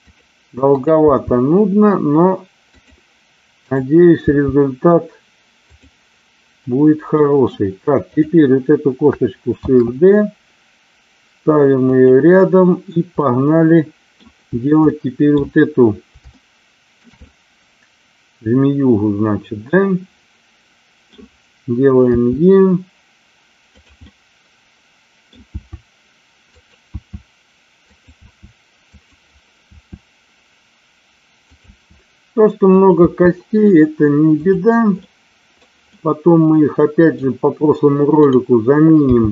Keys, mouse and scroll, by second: 0.0 click, 0.7 click, 1.5 g, 2.7 click, 3.6-4.7 drag, 4.7 g, 7.1 middle click, 8.1 click, 9.6 shift+d, 11.8 click, 13.3 middle click, 15.0 middle click, 16.5 shift+middle click, 17.3-21.1 middle drag, 22.1 e, 23.7 click, 24.0-25.3 middle drag, 25.5 e, 26.5 click, 27.0 e, 28.1 e, 29.0 click, 29.7 e, 31.5 click, 31.6 e, 32.7 click, 33.0 e, 34.3 click, 35.0 middle click, 35.8-37.2 middle drag, 38.2-39.3 drag.